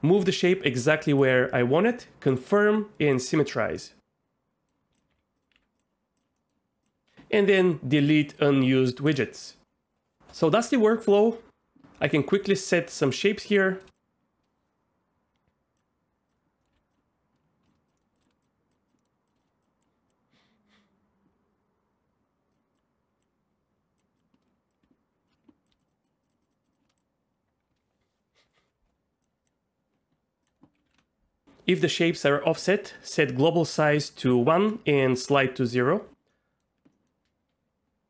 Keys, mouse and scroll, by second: 0.1 r, 0.2 r, 1.2 click, 2.3 click, 3.1 click, 3.8 middle click, 5.1 g, 5.5 r, 5.6 r, 5.7 click, 6.4 middle click, 6.8 click, 7.1 middle click, 9.0 click, 12.1 click, 12.5 shift+click, 13.5 shift+click, 13.9-15.8 drag, 16.6 middle click, 16.7 ctrl+z, 16.9 click, 18.0 middle click, 18.1 click, 18.5 drag, 19.0 middle click, 19.6 click, 20.1-22.5 drag, 22.7 click, 23.2 click, 24.7 shift+click, 25.9 shift+click, 26.3 shift+click, 26.4 shift+drag, 26.5 shift+click, 27.0-29.2 drag, 29.4 click, 30.5 click, 31.4-35.4 drag, 36.3 middle click, 36.9 middle click.